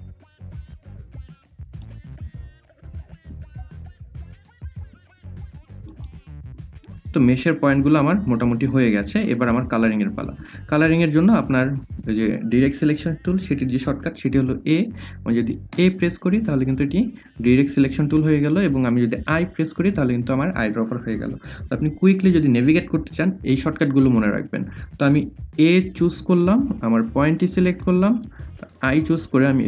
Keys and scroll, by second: 2.0 ctrl+z, 14.4 a, 19.4 i, 24.9 a, 27.4 i.